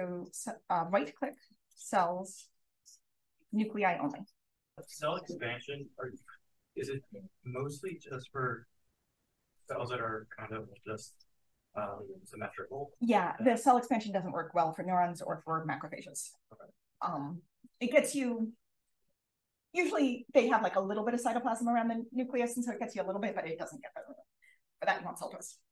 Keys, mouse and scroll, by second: 3.9 click.